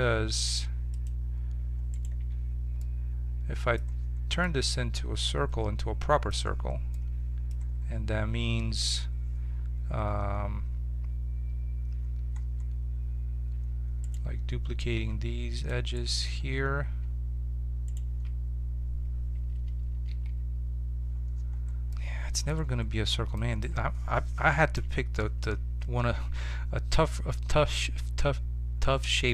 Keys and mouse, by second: 0.1 z, 0.3 x, 1.9-3.8 right drag, 2.1 Tab, 2.8-3.8 middle drag, 14.0-15.8 right drag, 14.9 ctrl+Tab, 15.9-18.5 right drag, 20.0 w, 24.3 KP_7, 26.3 z, 27.9 z.